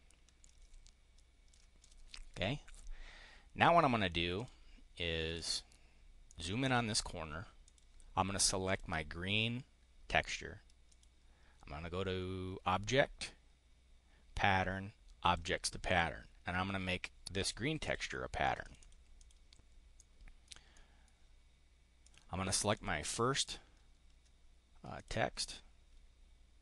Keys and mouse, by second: 0.3-1.5 ctrl+drag, 1.7 click, 4.2 click, 5.2 click, 6.2 click, 7.6 click, 8.6 click, 10.8 click, 15.2 click, 15.7 click, 17.8 click, 18.3 click, 18.7 click, 19.1 click, 19.8 click, 20.4 click, 21.7 click, 22.6 click, 24.9 click.